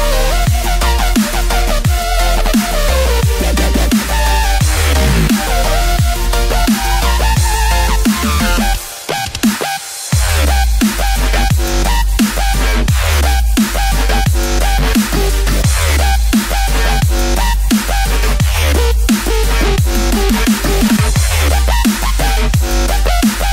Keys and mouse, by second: 0.4 shift+click, 1.1 shift+click, 1.6 shift+click, 2.1 shift+click, 3.2 ctrl+b, 11.3 click, 13.0 alt+click, 14.2 middle click, 16.4 shift+right click, 17.1 middle click, 18.4 shift+right click, 18.9 shift+right click, 19.4 shift+click, 19.8 shift+click, 20.4 shift+click, 21.1 shift+click, 21.6 shift+click, 22.0 shift+click, 22.9 shift+click, 23.3 shift+click.